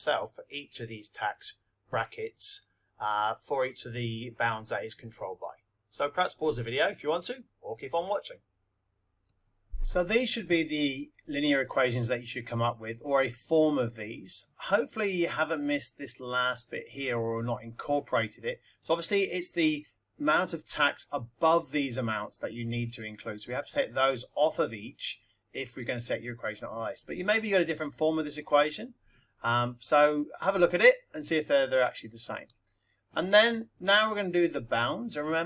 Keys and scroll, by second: 9.3 x, 10.4 ), 32.3 Right.